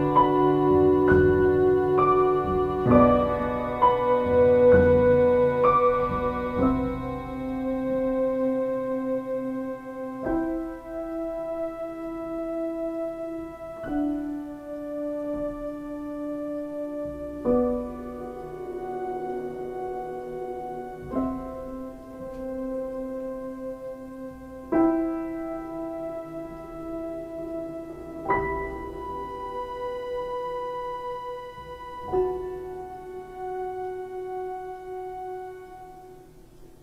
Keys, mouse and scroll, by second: 8.4 click.